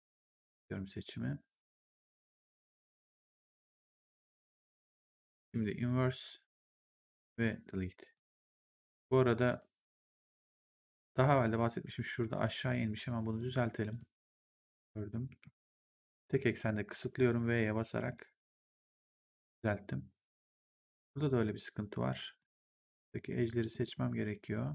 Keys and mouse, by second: 5.8 click, 7.3 click, 8.0 right click, 8.7 ctrl+1, 9.4 click, 10.1 ctrl+1, 12.3 click, 13.3 shift+click, 15.2 w, 15.9 click, 17.5 v, 18.0 middle click, 22.3 right click, 23.7 click.